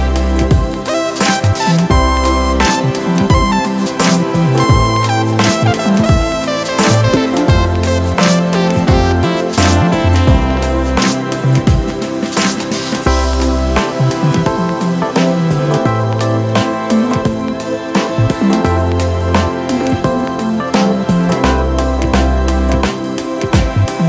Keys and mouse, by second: 2.8 click, 4.6 click, 8.0 click, 9.9 click, 11.3-14.6 drag, 16.7 click, 17.9-19.7 drag, 19.7 alt+click.